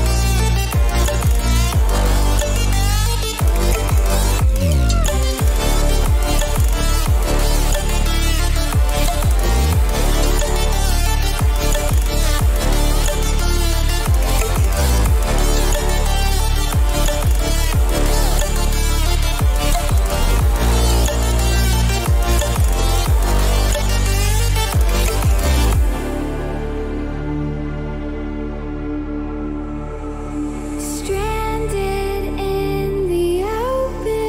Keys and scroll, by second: 3.1 Return, 11.5-13.8 typing, 16.5 t, 20.4-21.8 typing, 22.2 Return, 27.8 t.